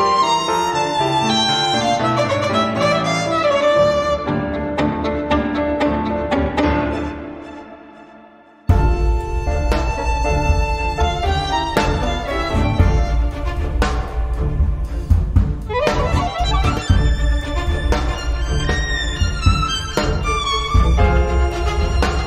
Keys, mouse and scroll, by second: 11.1-11.5 scroll down 1, 11.7-18.0 drag, 18.4-18.8 scroll up 1, 19.3 scroll down 1, 20.6-22.2 drag.